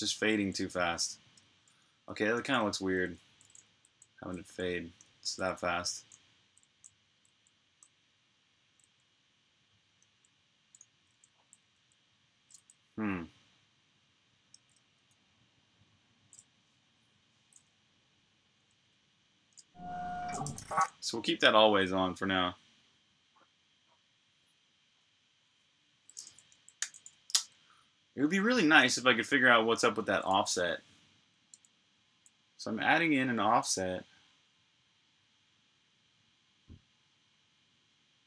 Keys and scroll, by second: 0.0-0.2 typing, 2.2-6.9 typing, 9.8-11.6 typing, 14.4 super+q, 18.6 u, 20.1-20.9 typing, 26.6 super+j, 28.1-28.8 typing, 31.3 j.